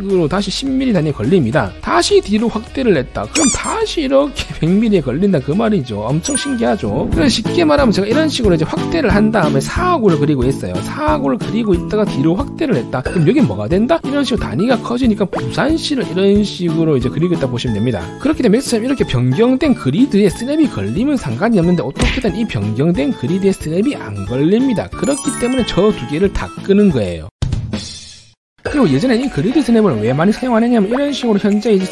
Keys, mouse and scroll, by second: 0.3 click, 1.1 click, 1.6 click, 2.2 scroll up 1, 2.9 scroll up 1, 4.3 click, 5.0 click, 5.7 click, 8.6 click, 9.3 scroll up 2, 10.2 click, 10.7 click, 11.3 click, 11.9 click, 12.3 scroll down 1, 14.9 click, 15.6 click, 16.2 click, 17.2 click, 20.1 scroll down 1, 22.0 scroll up 2, 22.6 scroll down 2, 23.3 click, 23.8 click, 24.1 scroll up 1.